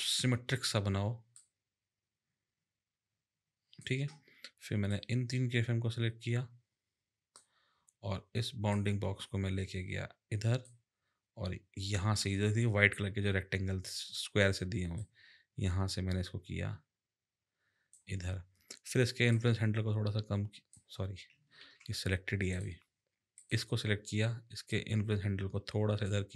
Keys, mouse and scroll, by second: 1.3 click, 4.9 click, 8.7 click, 15.0 click, 19.3 click, 21.6 ctrl+z, 22.5 click, 23.3 click, 24.7 click.